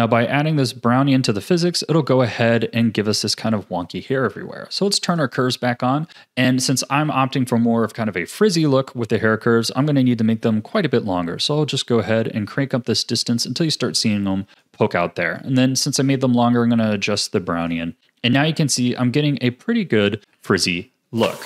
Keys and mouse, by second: 10.9-14.7 drag, 15.5-17.8 drag, 18.7-20.1 drag, 20.3 a.